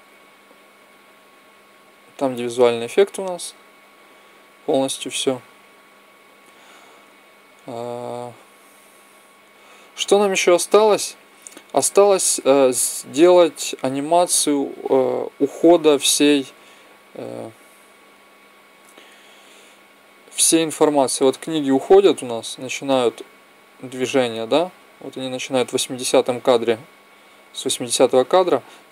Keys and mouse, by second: 11.6-13.6 drag, 14.2-16.0 drag, 17.2-20.8 drag.